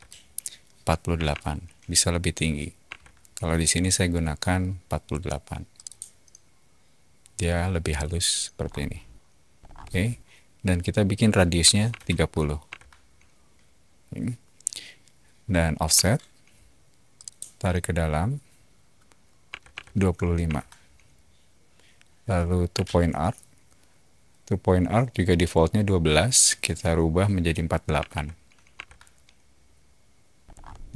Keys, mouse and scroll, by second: 0.9-1.7 typing, 2.8 Return, 5.7 click, 7.9 click, 8.5 scroll down 2, 9.6 scroll up 2, 9.6 middle click, 11.6 3, 11.9 0, 12.6 Return, 15.9 f, 17.1 click, 19.4 2, 19.7 5, 20.4 Return, 22.7-24.2 typing, 27.7-28.6 typing, 28.7 Return, 30.4 middle click.